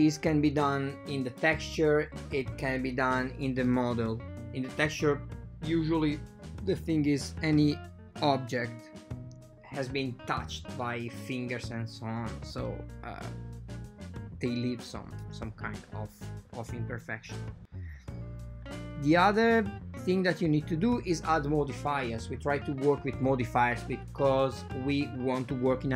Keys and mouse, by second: 3.3 click, 3.7 typing, 4.5-5.0 drag, 5.3 super+z, 5.8 click, 6.8 typing, 8.1-9.3 drag, 11.1-12.9 drag, 17.9-19.5 shift+drag, 19.7 drag, 20.7-22.0 shift+drag, 22.2 click, 22.5 drag, 22.7-24.0 shift+drag, 25.4-25.9 drag.